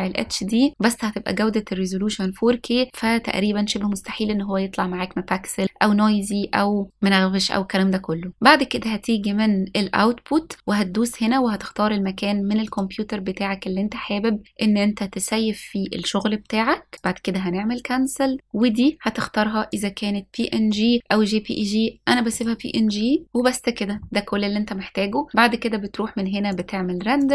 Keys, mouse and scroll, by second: 9.7-12.6 scroll down 1, 12.6 click, 19.7-22.4 drag, 22.9-23.2 scroll down 2, 26.5-27.3 drag.